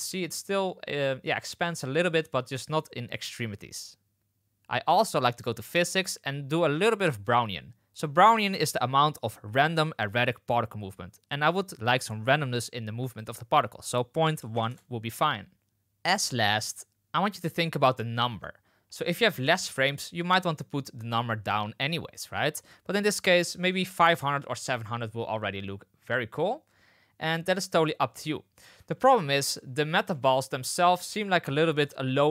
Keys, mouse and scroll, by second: 0.0 space, 5.5 click, 13.0-15.2 drag, 15.3 middle click, 15.8 space, 22.1-24.8 middle drag, 23.8 KP_0, 24.6 space, 28.5 space, 29.1-29.4 shift+middle drag, 30.2 shift+middle click, 32.1 shift+middle drag.